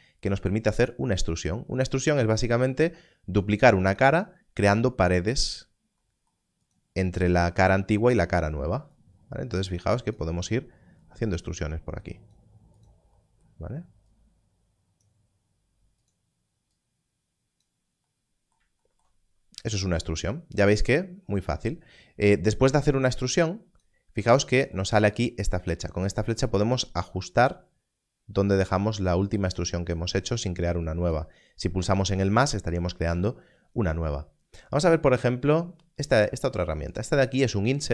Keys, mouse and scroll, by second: 1.2 click, 6.6 click, 8.9 click, 19.1 scroll down 1, 24.4 click, 25.7 click, 36.6 click.